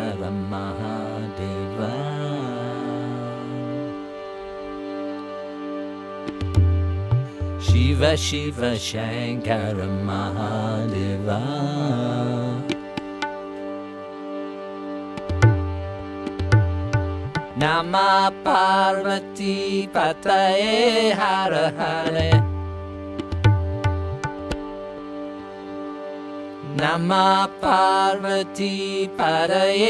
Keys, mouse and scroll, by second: 4.1 click, 5.0 click, 5.9 click, 7.9 click, 8.8 click, 9.9 click, 10.8 click, 12.1 click, 13.0 click, 14.1 click, 14.8 click, 16.8 click, 17.7 click, 18.8 click, 20.7 click, 21.4 click, 22.4 click, 23.2 click, 24.0-25.2 drag, 25.7 click, 26.7 click, 27.7 click, 28.7 click.